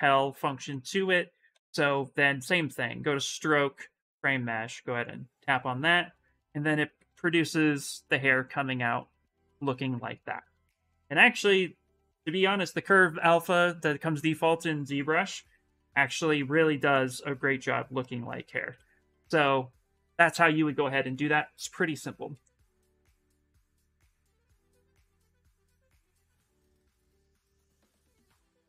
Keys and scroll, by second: 1.3 ctrl+z, 5.8 shift+f, 9.7 shift+f, 10.1 shift+f, 18.4 s.